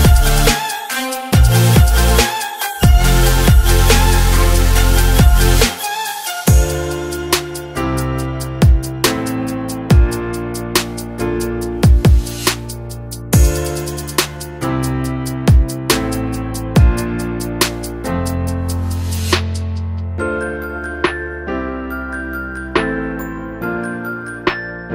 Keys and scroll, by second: 4.2 ctrl+z, 12.3 ctrl+z, 20.2 ctrl+z.